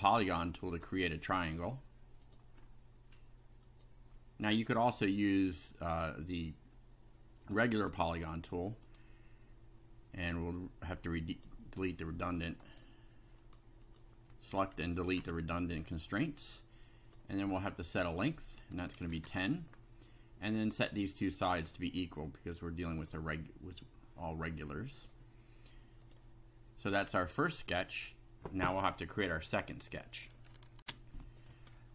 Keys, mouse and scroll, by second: 0.7 click, 2.2 click, 3.6 click, 5.9 click, 7.4 click, 7.8 middle click, 8.9 middle click, 11.3 click, 12.6 right click, 13.4 click, 13.9 click, 15.2 Delete, 17.1 click, 18.0 click, 19.0 KP_1, 19.0 0, 19.3 KP_Enter, 20.7 middle click, 21.6 click, 23.0 click, 25.0 click, 26.0 click, 30.8 ctrl+r, 31.4 click, 31.7 scroll down 1.